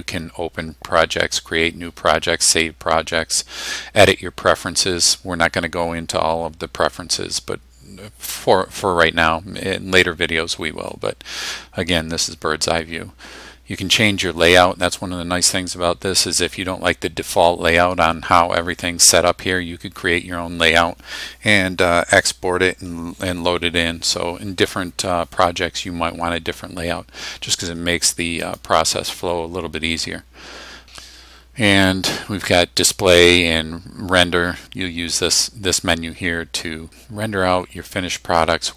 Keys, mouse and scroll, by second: 28.5 click.